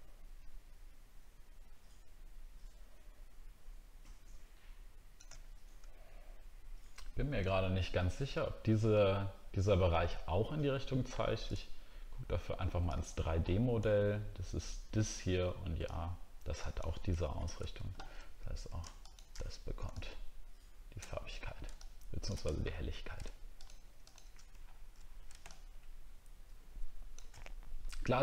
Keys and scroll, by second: 17.4 alt+Tab, 22.6 scroll up 2, 24.6 alt+scroll down 1.